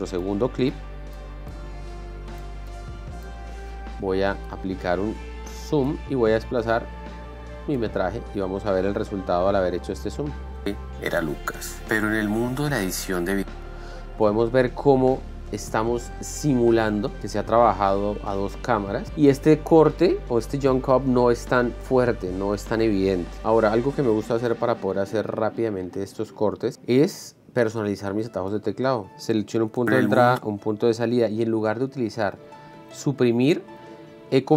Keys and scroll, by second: 11.0 alt+space, 29.1 Right, 29.7 i, 30.3 space, 31.2 o.